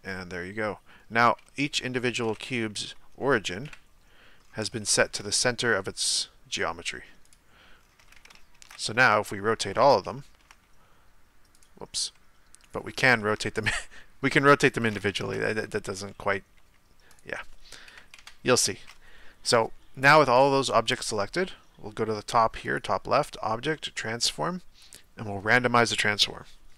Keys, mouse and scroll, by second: 2.1 right click, 3.6 KP_1, 4.4-4.8 scroll up 1, 4.8-5.4 shift+middle drag, 5.4 r, 7.8-8.6 scroll down 1, 8.6 ctrl+z, 9.1-10.6 shift+middle drag, 10.6 r, 12.6 right click, 13.2 r, 15.2 ctrl+z, 16.1-16.6 middle drag, 16.6 r, 17.9 KP_1, 18.2 KP_Decimal, 25.6 click.